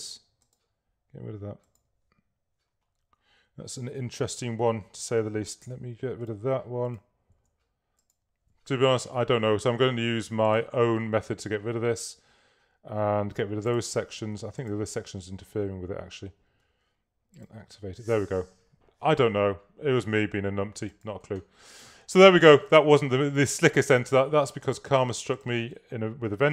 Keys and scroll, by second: 5.7 a, 13.4 v, 15.2 BackSpace.